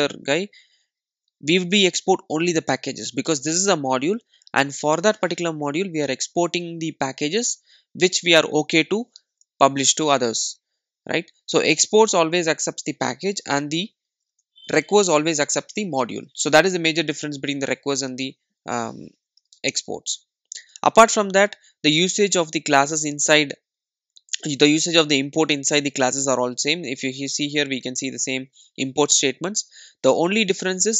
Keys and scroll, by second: 14.2 super+e, 19.2 super+e, 23.0 super+e.